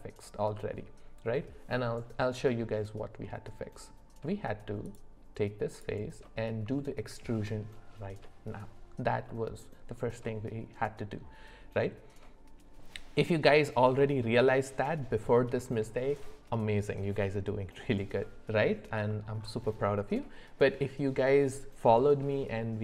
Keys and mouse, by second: 2.5-3.9 middle drag, 4.9-6.2 drag, 6.2 middle click, 6.8 shift+middle click, 9.3 middle click, 19.1 middle click.